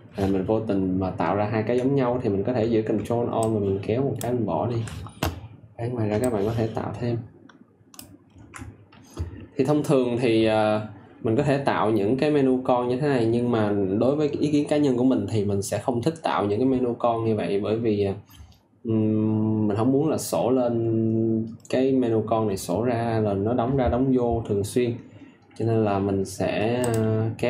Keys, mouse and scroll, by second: 2.4 click, 3.3 ctrl+alt+click, 6.1 ctrl+click.